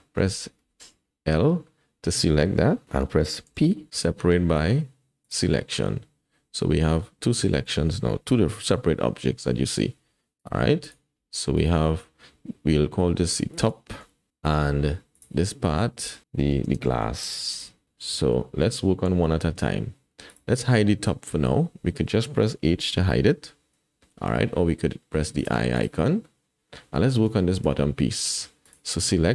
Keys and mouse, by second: 0.6 l, 3.5 p, 6.7 Tab, 9.9 g, 10.8 click, 11.2 g, 13.7 click, 15.1 click, 16.2-17.5 drag, 17.3 s, 17.8 KP_1, 18.4 shift+drag, 20.3 click, 22.6 h, 25.4 click, 25.8 click, 27.4 shift+click.